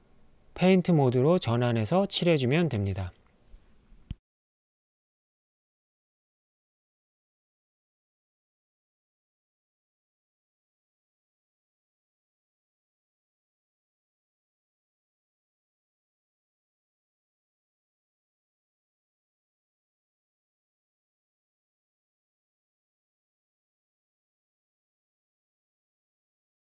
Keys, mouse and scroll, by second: 3.2 ctrl+Tab, 7.6-13.6 drag, 14.9-17.8 drag, 16.6 BackSpace, 19.8 click, 22.5 f, 22.8 click, 23.2 click, 24.0 middle click, 24.5 click, 25.2 middle click, 25.6 click, 26.0 middle click, 26.4 click.